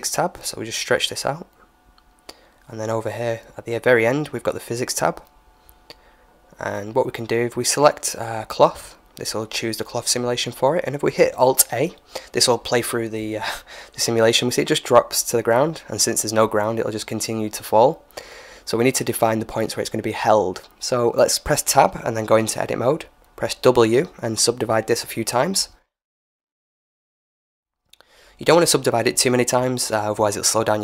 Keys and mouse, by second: 1.0-2.8 drag, 3.9-5.6 drag, 8.4-10.1 drag, 12.6 alt+a, 15.7-18.3 drag, 18.6 Tab, 19.8 w, 22.0 click, 22.2 w, 23.4 w, 24.2 w, 26.3 w, 28.6 Tab, 29.7-30.8 middle drag.